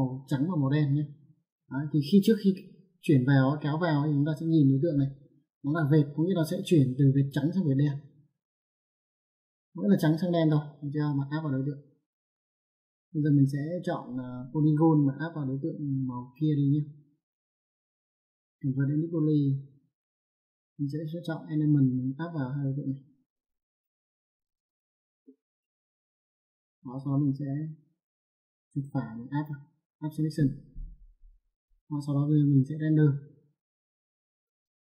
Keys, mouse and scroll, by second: 2.5 click, 6.4 click, 11.1 click, 14.3 click, 18.2 click, 19.5 click, 21.3 click, 22.4 click, 23.3 ctrl+click, 25.4 middle click, 27.7 click, 28.2 right click, 29.6 click, 34.0 click.